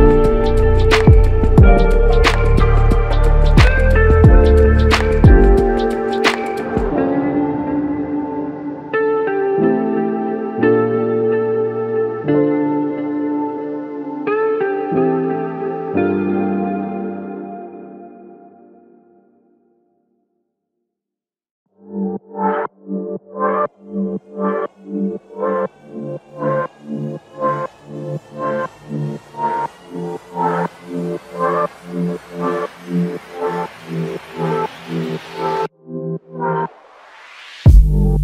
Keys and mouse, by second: 2.1 alt+click, 7.3 alt+shift+click, 8.0 alt+click, 16.9 alt+shift+click, 17.9 typing, 20.7 Escape, 24.6 typing, 26.9 ctrl+click, 33.7 ctrl+i.